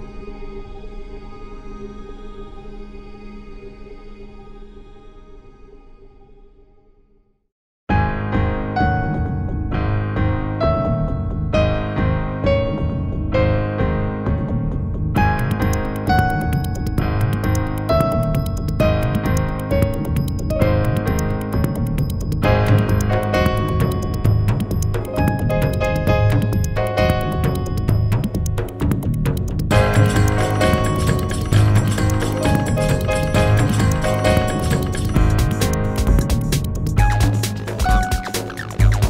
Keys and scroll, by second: 4.0 space.